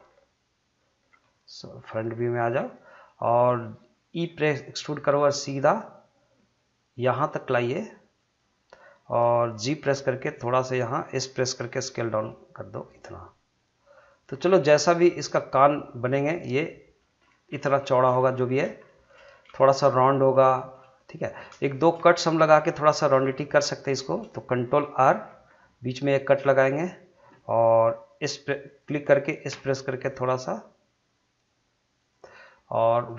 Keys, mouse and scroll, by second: 1.5-4.3 middle drag, 4.3 e, 8.2 click, 9.7 g, 10.8 click, 11.6 s, 14.1 click, 14.4-14.7 scroll down 1, 14.7-17.2 middle drag, 17.2 scroll up 1, 17.8 shift+middle click, 18.2 middle click, 18.7 shift+scroll up 1, 18.8 shift+middle click, 19.3 scroll up 2, 19.6 shift+middle click, 20.3 shift+middle click, 21.3 scroll down 1, 21.6 shift+middle click, 22.0 middle click, 23.0 scroll up 1, 23.2 shift+middle click, 25.1 ctrl+r, 26.5 click, 29.5 s, 32.0 click, 32.4-33.1 middle drag.